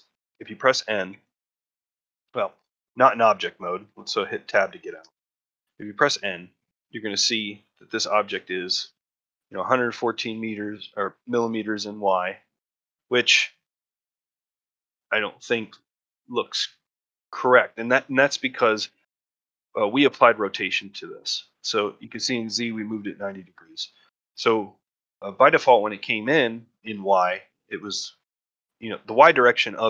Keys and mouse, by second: 4.8 Tab, 5.6-6.1 shift+middle drag, 12.1-12.5 ctrl+middle drag, 12.8-13.2 middle drag, 13.3 shift+middle drag, 13.7 middle drag, 14.2 shift+middle drag, 14.5-14.9 middle drag, 15.2 middle drag, 15.7-16.1 shift+middle drag, 16.5 ctrl+middle drag, 16.9 shift+middle click.